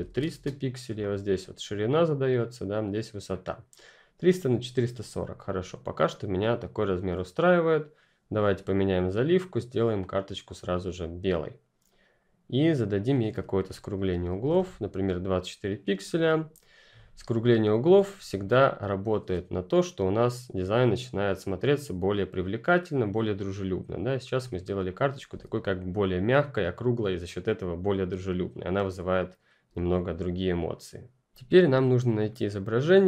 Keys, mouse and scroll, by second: 0.0-0.5 typing, 5.5 click, 9.2 click, 12.5 click, 14.1-14.9 typing, 16.6 click, 18.4-18.9 ctrl+scroll up 1, 19.0 scroll up 2, 25.3-26.6 scroll up 1, 32.2 click.